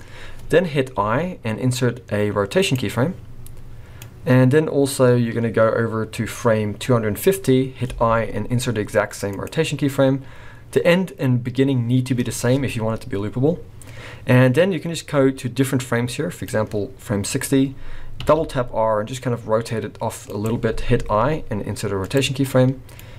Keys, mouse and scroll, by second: 1.0 i, 4.0 click, 7.9 i, 10.7 click, 17.4-18.2 scroll up 1, 18.2 r, 21.0 i, 23.0 click.